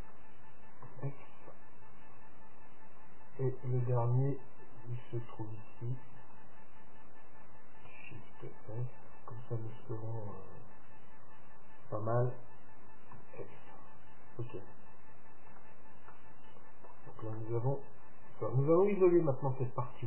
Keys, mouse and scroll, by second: 0.0-1.9 right drag, 1.0 f, 1.5-3.4 middle drag, 3.4-5.4 right drag, 6.2-8.0 middle drag, 8.3-10.1 right drag, 13.3 f, 15.7 Tab, 16.2-19.4 middle drag, 19.6 Tab.